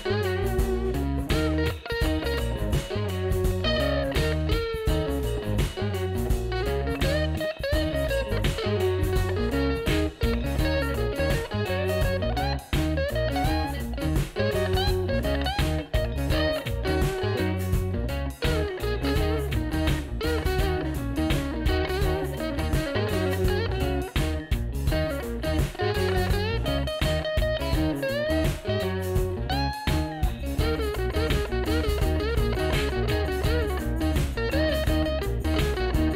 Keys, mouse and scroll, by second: 26.6 F4.